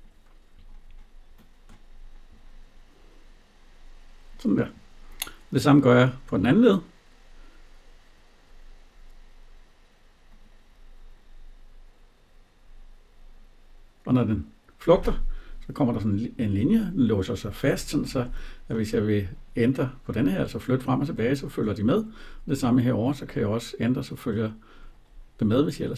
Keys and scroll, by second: 17.6 Escape.